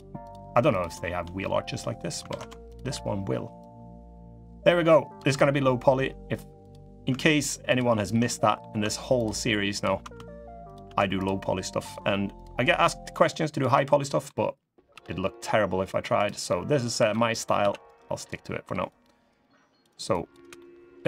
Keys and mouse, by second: 0.5 shift+click, 1.1 middle click, 2.0 ctrl+z, 3.4-4.9 drag, 5.0 3, 6.3 click, 7.4 ctrl+click, 8.0 middle click, 8.9 ctrl+click, 9.5 ctrl+click, 10.9 ctrl+click, 12.1 ctrl+click, 12.8 ctrl+click, 13.3 ctrl+click, 13.7 middle click, 14.7 g, 16.2 middle click, 16.7 3, 16.8 middle click, 17.3 c, 20.3 middle click.